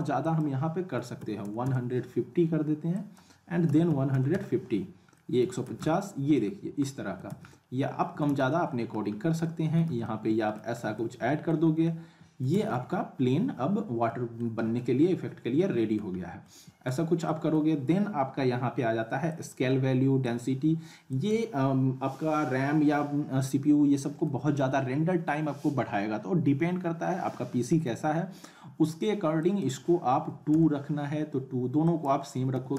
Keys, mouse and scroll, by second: 0.2 click, 2.9 click, 5.1-5.7 alt+middle click, 5.6 z, 5.9-6.4 alt+middle click, 6.5-6.8 scroll up 1, 6.9-7.5 alt+middle click, 7.3 z, 7.5-8.4 alt+middle click, 8.3 z, 8.5-9.1 alt+middle click, 9.1-9.4 scroll up 1, 9.4-10.6 alt+middle click, 9.8 z, 10.0 alt+middle click, 10.7 scroll up 1, 10.9-11.6 alt+middle drag, 12.5 z, 12.7-13.0 scroll up 1, 13.0-14.6 alt+middle drag, 14.6 scroll up 1, 14.8-16.0 alt+middle drag, 16.1 scroll up 1, 16.4-17.1 middle click, 16.9-17.3 scroll down 1, 17.3 middle click, 19.3 click, 23.9 middle click, 24.7-25.4 alt+middle click, 25.5-25.9 scroll up 1, 27.2-27.9 middle click, 28.1 scroll up 1, 29.4 click, 31.9 click.